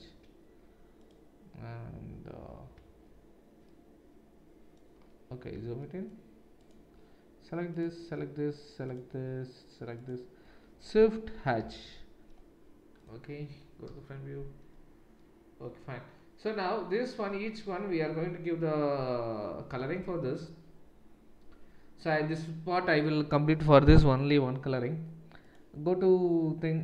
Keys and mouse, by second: 6.6 shift+click, 6.6-7.7 shift+middle drag, 7.7 shift+click, 7.9-25.8 shift+middle drag, 11.6 shift+h, 13.0 click, 13.8 KP_1, 25.8-26.8 drag.